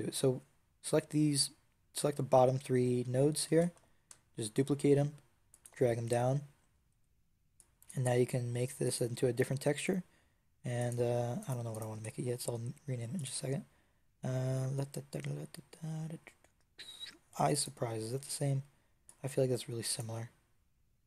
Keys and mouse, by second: 3.4 shift+d, 5.5-6.5 drag, 6.8 middle click, 10.3-11.6 drag, 11.8 Tab, 18.0 Tab.